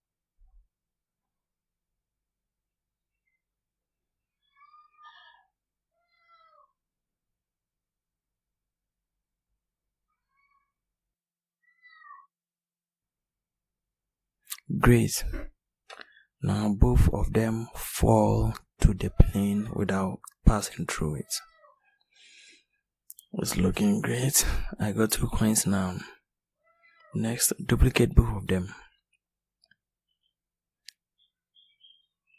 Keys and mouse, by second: 2.3 r, 10.1 r, 25.4-27.7 drag, 29.0 shift+d, 30.3 click.